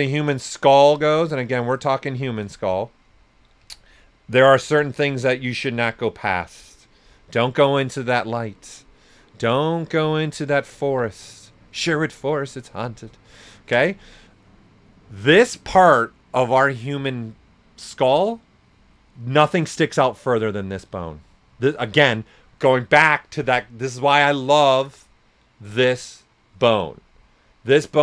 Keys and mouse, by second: 1.4 right click, 3.6 s, 3.6 click, 8.7 right click, 10.1 shift+click, 10.4 typing, 10.8 ctrl+right click.